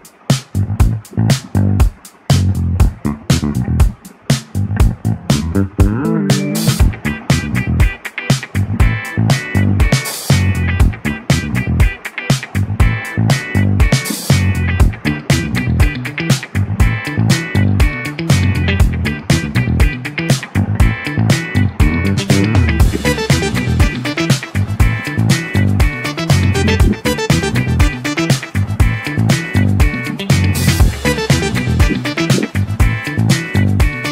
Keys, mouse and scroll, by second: 0.0-0.8 middle drag, 0.8-1.2 scroll up 5, 1.2-1.8 middle drag, 1.8 click, 2.6-2.9 scroll up 2, 2.9-4.7 middle drag, 4.7-12.2 drag, 12.2-12.6 scroll up 1, 13.5-14.9 drag, 14.9-16.9 middle drag, 16.9-19.0 drag, 19.0-19.4 scroll down 1, 19.4-20.8 middle drag, 20.8-26.0 drag, 26.0-27.6 middle drag, 27.6-28.2 scroll up 2, 28.2-29.5 middle drag, 29.5-30.0 scroll up 1, 30.0-33.9 shift+middle drag, 33.9-34.1 drag.